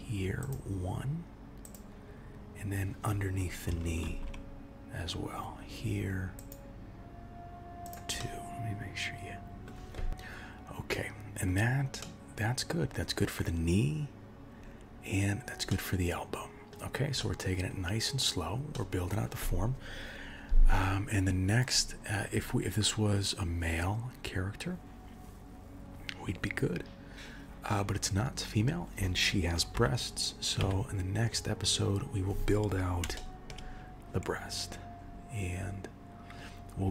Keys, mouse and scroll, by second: 4.0 ctrl+r, 8.1 middle click, 10.3 scroll down 1, 10.8 middle click, 11.5-12.0 scroll down 2, 12.0 middle click, 12.7-13.3 scroll down 4, 14.6-15.7 scroll down 4, 15.7 middle click, 17.2 middle click, 18.7 middle click, 29.7 KP_1, 30.6 KP_3, 31.7-32.8 scroll up 4, 33.1 shift+middle click, 34.9-36.2 scroll up 3.